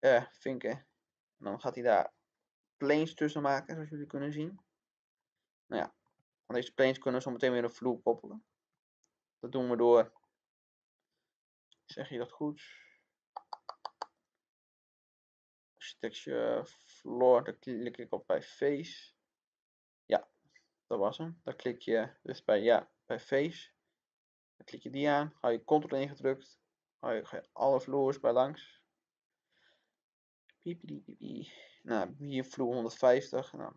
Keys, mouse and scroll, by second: 3.8-4.1 scroll down 2, 4.1 middle click, 4.7 scroll up 1, 5.1-6.9 middle drag, 8.3 click, 8.7-10.9 middle drag, 14.1 click.